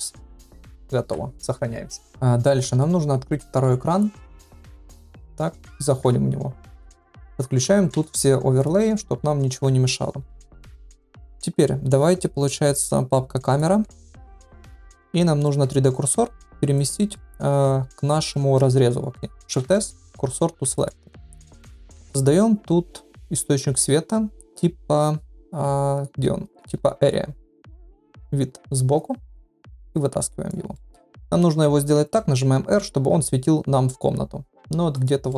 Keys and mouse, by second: 1.0 ctrl+s, 2.5 shift+click, 4.0-5.3 drag, 6.0 KP_0, 7.9 n, 8.5 click, 12.6 click, 13.4 click, 14.2 shift+middle drag, 14.6 middle drag, 15.4 middle drag, 16.8 click, 17.1 shift+middle drag, 18.3-18.6 middle drag, 19.6 shift+s, 21.8 shift+a, 28.0 KP_3, 29.9 click, 30.7 shift+middle drag, 31.9 r, 35.2-35.3 middle drag.